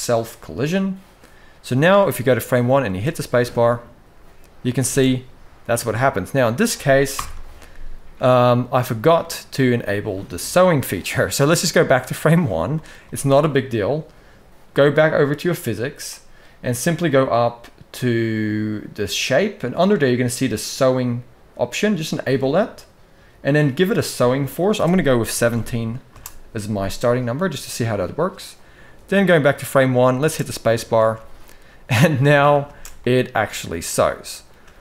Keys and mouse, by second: 1.7-2.2 middle drag, 2.6 space, 4.5 space, 4.8-6.2 middle drag, 6.9 shift+Left, 8.1-8.9 middle drag, 12.5 middle click, 23.8-25.9 drag, 29.0 click, 30.0 space, 31.0 alt+a, 32.4 space, 32.7-34.2 middle drag, 34.4 space.